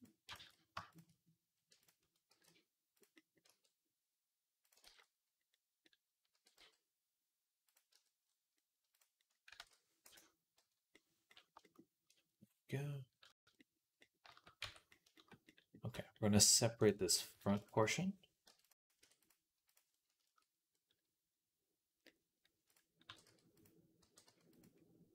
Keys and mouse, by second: 0.2 ctrl+z, 0.8 shift+click, 0.8 shift+middle click, 1.2 r, 2.1 g, 3.3 r, 4.7 ctrl+z, 6.1 r, 7.8 Tab, 9.2-13.1 ctrl+right drag, 9.4 ctrl+s, 9.9 shift+/, 10.4 /, 13.1 shift+middle click, 13.4-20.0 right drag, 14.1-17.2 shift+middle drag, 14.7 Tab, 16.6 click, 17.5 shift+click, 17.5 shift+middle click, 18.3 p, 18.8 Tab, 19.1 click, 19.1 middle click, 20.0 shift+middle click, 20.3-21.4 drag, 21.4-25.1 right drag, 22.5 click, 22.9 g, 23.9 g.